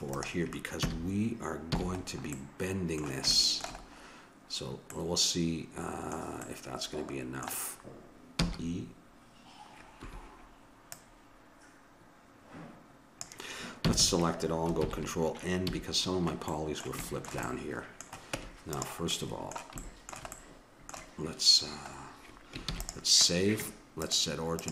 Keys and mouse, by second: 0.8 a, 1.7 a, 2.2-3.5 middle drag, 3.8-8.3 middle drag, 8.5 e, 10.9-12.8 drag, 13.8 a, 14.0 a, 14.8 ctrl+n, 15.7 a, 18.3 Tab, 22.6 ctrl+s, 24.0-24.7 drag.